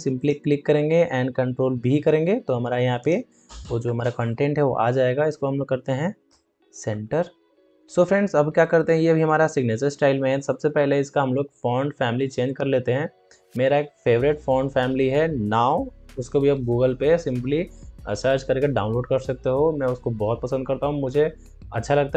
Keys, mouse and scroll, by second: 0.1 click, 0.7 click, 1.4 ctrl+v, 2.9 click, 3.8 ctrl+t, 6.8 ctrl+a, 7.6-7.9 ctrl+alt+scroll up 1.